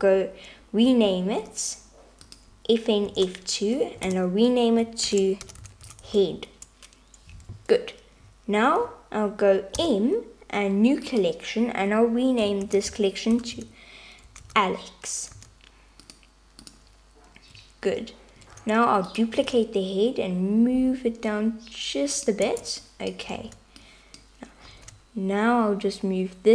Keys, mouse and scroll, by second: 1.0 F2, 3.2 F2, 9.8 m, 18.6 shift+d, 19.4 g, 23.0 Tab, 23.0 click, 24.0 alt+z, 24.0 click, 24.8 g.